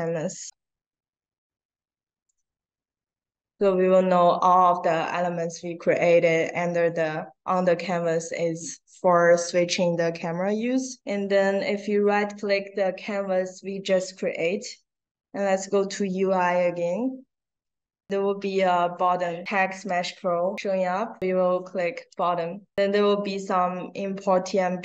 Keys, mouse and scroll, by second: 1.7 a, 2.2 space, 3.4 click, 22.0 click.